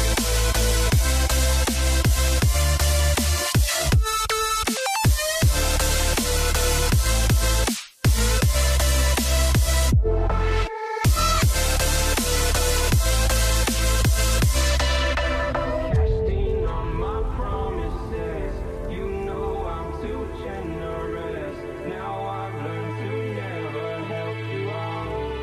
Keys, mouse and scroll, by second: 1.0 ctrl+click, 4.5 Return, 5.4 Down, 6.6 Down, 8.0 Right, 8.2 Right, 8.7 Right, 8.9 Right, 9.5 Down, 10.0 Down, 11.4 ر, 13.0 alt+right click, 14.0 typing, 16.4 typing, 17.0-17.4 alt+scroll down 1, 18.3 ctrl+ت, 22.2 alt+right click, 23.2 double click, 24.3 ctrl+ظ.